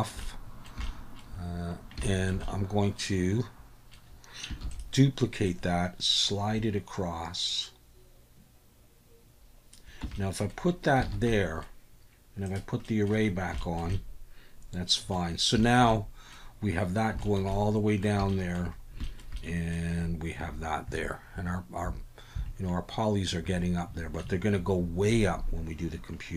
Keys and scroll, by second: 4.6 shift+d, 10.0 Tab, 11.0 alt+a.